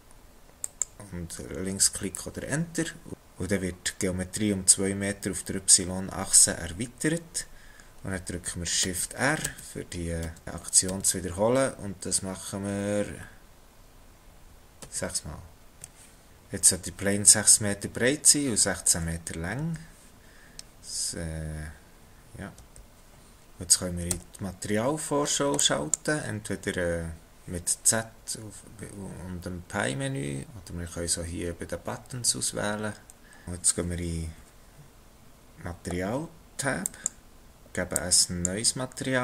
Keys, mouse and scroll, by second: 8.9 shift+r, 9.4 shift+r, 10.3 shift+r, 10.9 shift+r, 12.1 shift+r, 15.5 shift+r, 19.6 n, 22.5 n, 24.1 z, 36.8 Left, 39.0 Left.